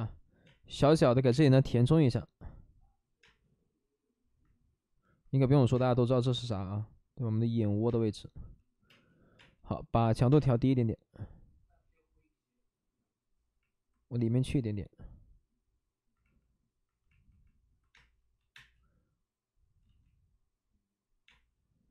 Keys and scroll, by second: 4.4 space, 6.0 ctrl+z, 7.8 space, 8.8 space, 17.9 space, 18.3 3, 18.5 space, 19.8 ctrl+z, 21.2 space.